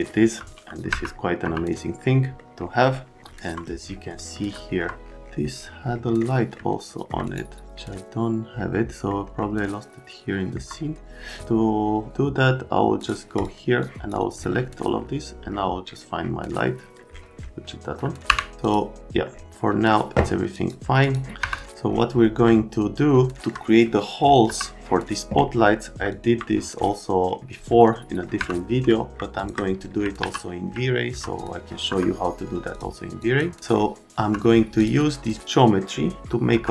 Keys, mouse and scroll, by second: 0.9 F3, 1.4 F3, 2.4 middle click, 4.2-4.6 scroll up 2, 4.7 scroll down 1, 6.2-6.6 scroll down 2, 6.6 middle click, 7.2 right click, 8.7 middle click, 13.0 click, 13.4 click, 13.8 click, 18.3 Delete, 18.6 click, 20.5 click, 21.0 click, 21.4 F3, 22.4 middle click, 24.5 F3, 26.1 click, 27.8 middle click, 28.4 F3, 28.8 right click, 29.4 click, 30.2 q, 30.7 right click, 31.3 click, 31.9 F3, 32.7 click, 33.2 click, 34.1 F3, 34.8 click, 35.2 click, 36.5 F3.